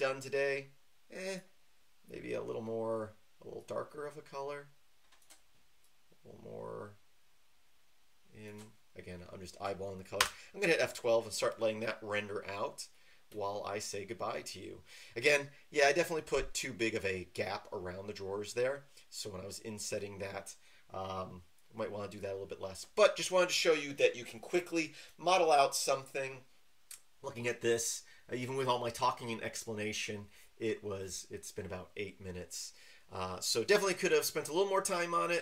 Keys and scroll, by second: 10.2 F12.